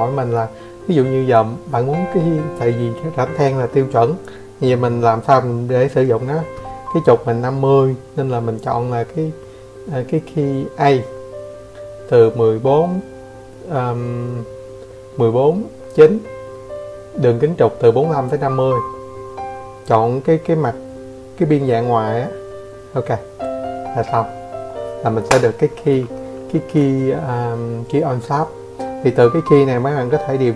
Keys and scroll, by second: 29.7 0.